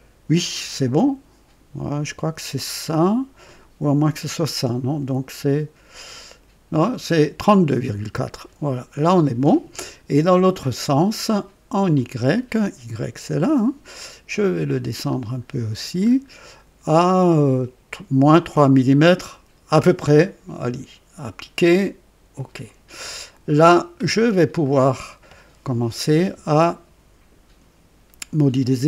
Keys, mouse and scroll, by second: 5.6 scroll down 1, 11.9 click, 14.5-15.2 scroll down 3, 15.7 scroll down 2, 21.2 click, 22.3 click, 23.1-24.2 scroll down 4, 24.6 right click.